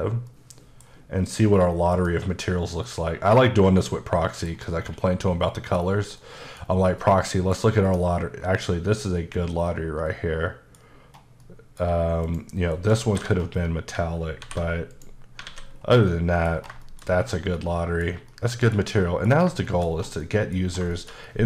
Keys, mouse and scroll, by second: 0.3 middle click, 2.0 click, 2.9 middle click, 4.6-5.3 scroll down 3, 5.3 middle click, 5.9-6.2 scroll up 2, 6.2 middle click, 6.7-7.0 scroll up 2, 7.0 middle click, 7.9 middle click, 11.2 scroll down 1, 11.4 middle click, 12.3 click, 12.8 KP_Decimal, 13.3-14.0 scroll up 4, 14.4 alt+m, 15.0 click, 15.5 alt+a, 15.8-16.1 scroll down 3, 16.1 middle click, 16.6 scroll down 2, 16.9 shift+middle click, 17.1 middle click, 17.3-17.6 scroll down 2, 17.6 middle click, 18.3 middle click, 19.0 middle click, 19.7 shift+middle click, 20.0-20.3 scroll up 2, 20.3 middle click, 20.7 scroll down 1, 21.0 shift+middle click.